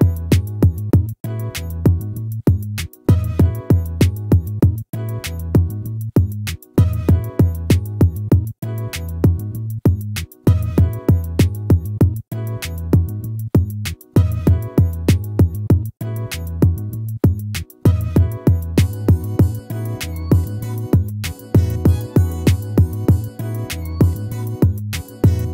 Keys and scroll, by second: 4.3 ctrl++.